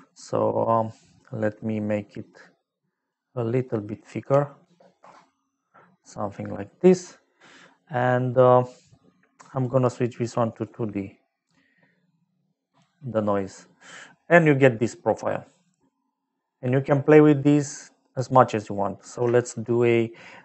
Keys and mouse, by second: 1.2 click, 2.1 click, 4.2 KP_5, 4.6 space, 5.0 Return, 9.5 click, 10.5 click, 11.7 middle click, 14.7 middle click, 18.4 middle click, 19.4 shift+a.